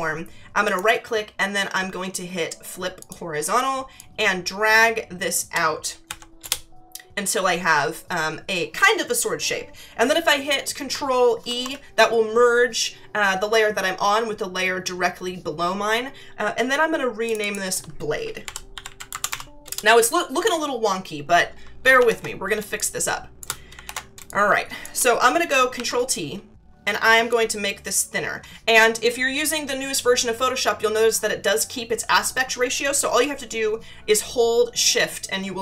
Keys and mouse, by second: 0.6 right click, 3.0 click, 3.9 click, 6.0 Left, 6.4 Return, 11.4 ctrl+e, 17.2 click, 18.2-19.6 typing, 22.6 space, 22.7 click, 23.8 ctrl+=, 24.2 space, 24.2 click, 27.3 click, 33.2 shift+click.